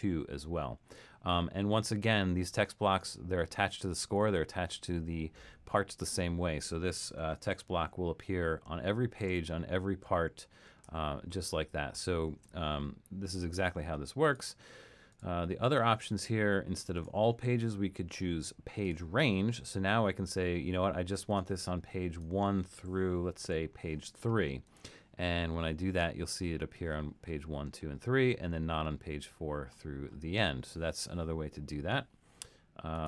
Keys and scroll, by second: 7.5 alt+super+., 9.4 alt+super+., 10.1 alt+super+., 10.9 alt+super+,, 11.3 alt+super+,, 12.0 alt+super+,, 23.4 3.